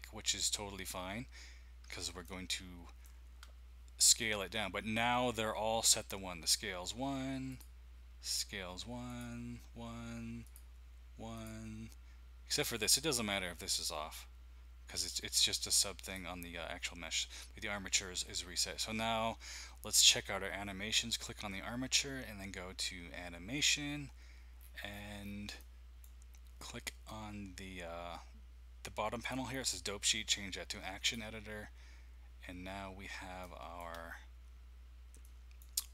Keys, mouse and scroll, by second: 1.0 scroll up 2, 2.2-3.1 shift+middle drag, 7.5 click, 9.0 click, 10.4 click, 11.3 click, 12.5 click, 16.0-16.9 drag, 23.5 click, 23.7 click, 24.6-26.0 scroll down 3, 25.6-26.7 middle drag, 29.6-31.8 drag, 33.4 shift+middle click, 34.0-35.2 scroll down 1.